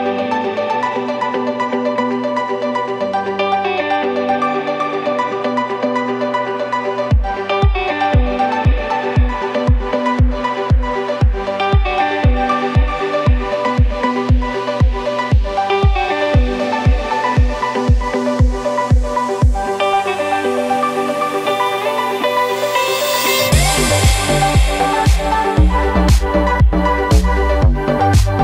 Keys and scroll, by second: 1.3 b, 2.4 Escape, 2.8 Escape, 9.2 b, 10.3 Escape, 13.8 ctrl+shift+p, 15.4 b.